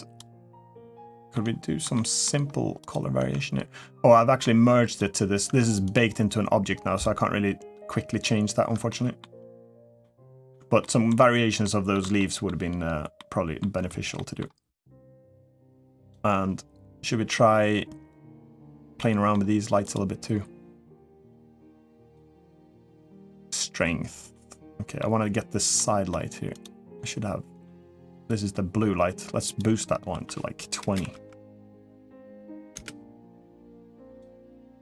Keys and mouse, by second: 0.8-1.1 shift+middle drag, 1.7 shift+middle click, 3.1 Tab, 4.7 click, 5.3 Tab, 5.7 click, 8.6-9.0 shift+middle drag, 9.8-10.3 middle drag, 10.6 shift+middle drag, 11.4-11.7 middle drag, 12.0 shift+middle click, 13.0-13.4 shift+middle drag, 13.9 middle click, 18.7 middle click, 19.6 click, 21.8 click, 24.1-24.7 middle drag, 25.5 middle click, 26.3 click, 26.7-27.4 middle drag, 27.9 click, 29.3-33.5 drag.